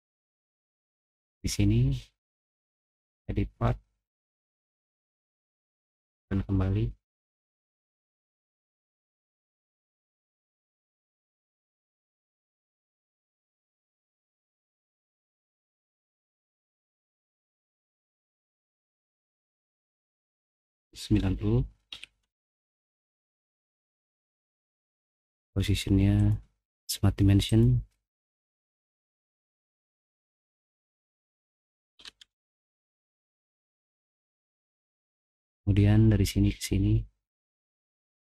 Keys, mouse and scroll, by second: 0.4 middle click, 0.9 click, 2.9 click, 5.8 click, 7.2-8.7 drag, 9.6 middle click, 9.6 scroll down 1, 10.0 middle click, 10.3 middle click, 14.3 click, 16.9 click, 17.8 middle click, 18.3 middle click, 18.8 middle click, 19.2 middle click, 20.3 click, 21.9-22.2 typing, 22.6 Return, 24.5 click, 26.1 click, 27.4 click, 29.0 middle click, 30.3 click, 31.1 click, 31.7-32.7 typing, 34.1-34.5 scroll down 1, 37.9 click.